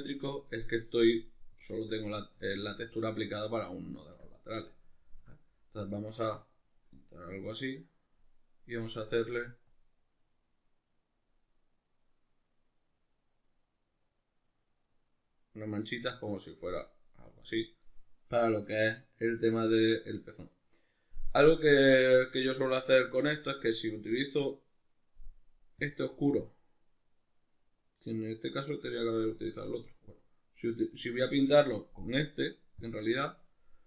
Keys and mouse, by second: 2.4 alt+q, 3.4-33.8 ctrl+middle drag.